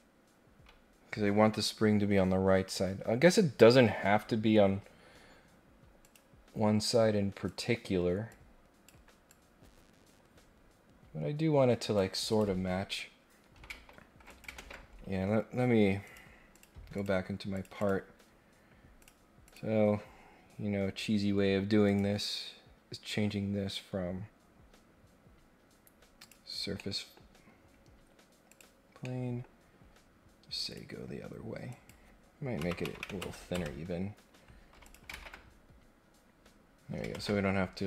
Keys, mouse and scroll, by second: 4.6 scroll up 1, 6.0 click, 7.4 click, 8.3 click, 9.3-11.9 drag, 12.3 click, 14.3 click, 14.6 ctrl+Tab, 16.0 click, 16.5 click, 16.9 click, 17.5 click, 17.7 click, 19.0 click, 19.4 click, 21.8 click, 26.2 click, 26.7 middle click, 27.7 scroll up 1, 28.5 click, 29.0-29.4 scroll down 1, 30.6 click, 31.7 click, 34.8 click, 37.1 ctrl+Tab.